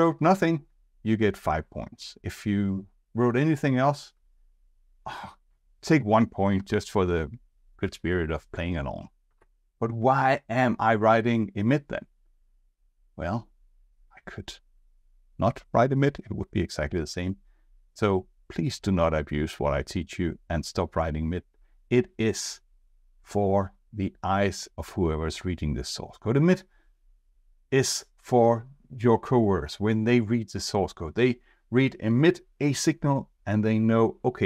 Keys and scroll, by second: 9.4 alt+Left.